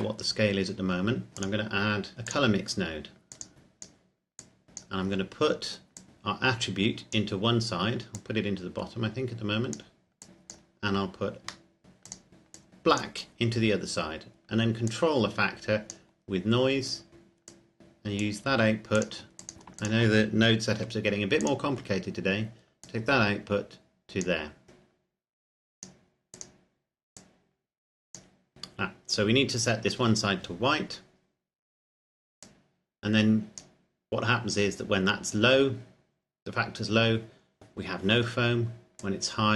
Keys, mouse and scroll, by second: 0.4-1.3 scroll up 1, 1.3 click, 3.5 click, 4.6 click, 5.0-5.9 scroll down 1, 5.9 click, 8.4 click, 11.1-11.7 scroll up 1, 11.8 shift+middle click, 12.2 click, 16.8-17.5 scroll down 1, 17.5 click, 19.4 shift+click, 20.7 g, 21.4 click, 21.8-22.8 scroll up 1, 22.8 click, 24.8 click, 32.6 click, 39.0 click.